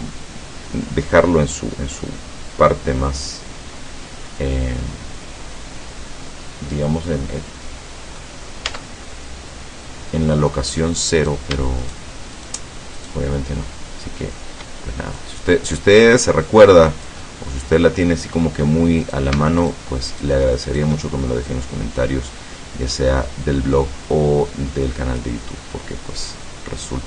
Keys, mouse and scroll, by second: 4.9-8.4 middle drag, 8.7 Tab, 9.2-10.3 middle drag, 11.2 right click, 11.9 shift+right click, 12.4 shift+right click, 13.0 shift+right click, 15.2-18.7 drag, 17.3-18.7 right drag, 19.1 right click, 19.7 shift+right click, 20.1 shift+right click, 20.7 shift+right click, 21.5-25.4 drag, 25.6-27.0 middle drag.